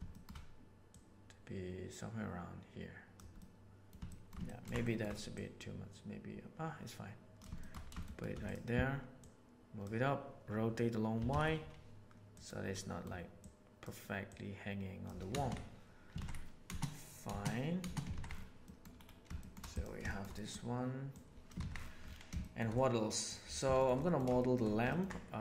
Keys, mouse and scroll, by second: 0.1 shift+middle click, 0.8-3.1 drag, 3.3 middle click, 4.0 shift+middle click, 4.4 ctrl+middle click, 4.7 shift+middle drag, 5.3-7.3 drag, 7.5 shift+middle click, 8.0 shift+middle click, 8.4 click, 9.1 click, 11.1 r, 12.6-13.0 middle drag, 13.4 right click, 14.1 right click, 15.2 space, 15.4 a, 16.1 alt+a, 16.6 space, 17.2 space, 17.8 space, 18.6 middle click, 19.3 shift+middle drag, 20.0 shift+middle click, 20.3 middle click, 21.2 click, 21.6 alt+a, 22.3 shift+middle click, 22.7-23.2 middle drag, 23.7 shift+middle click, 23.9-24.2 middle drag, 24.3 shift+middle click, 24.8 ctrl+middle click.